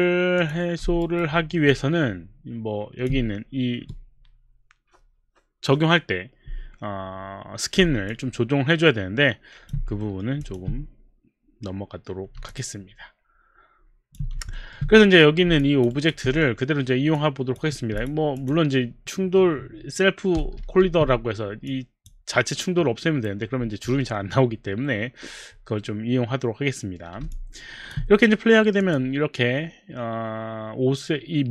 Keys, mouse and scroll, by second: 0.4 click, 0.6 click, 1.0 alt+right click, 1.1 click, 1.4 alt+right click, 1.4 alt+middle click, 1.7 alt+click, 8.1 alt+click, 10.1 alt+middle click, 10.4 alt+click, 11.0 alt+click, 12.5 alt+click, 13.0 alt+click, 14.6 alt+middle click, 15.4 alt+middle click, 15.8 alt+click, 15.9 alt+right click, 17.2 click, 17.9 click, 18.5 click, 20.6 ctrl+a, 21.7 click, 27.3 alt+click, 28.8 click.